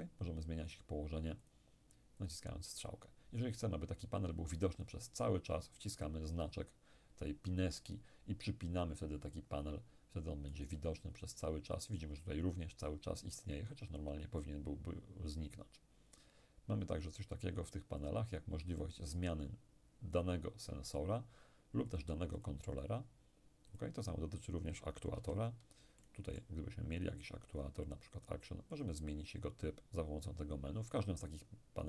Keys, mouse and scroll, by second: 6.0 click, 10.6 right click, 18.0 click, 21.9 click, 23.8 click, 25.2 n, 26.0-28.6 middle drag, 27.0 click, 28.8 click, 31.4 click.